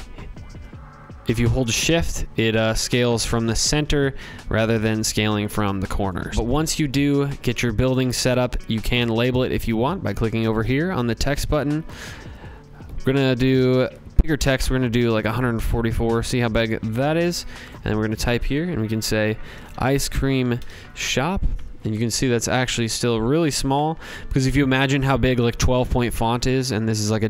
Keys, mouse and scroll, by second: 0.2-4.9 drag, 6.2 ctrl+z, 6.3 click, 7.8 click, 12.3 click, 14.0 click, 16.6 click, 18.3-20.6 typing, 21.6 click, 22.5 click, 24.8 click.